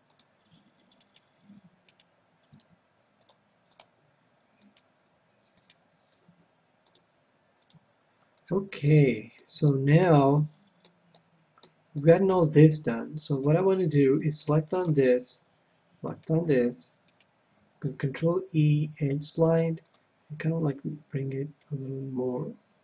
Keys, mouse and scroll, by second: 1.0-3.7 right drag, 3.2-4.9 drag, 4.6-7.4 right drag, 6.9-8.5 drag, 8.5-13.6 middle drag, 13.7 middle click, 14.6-19.0 right drag, 18.1 ctrl+e.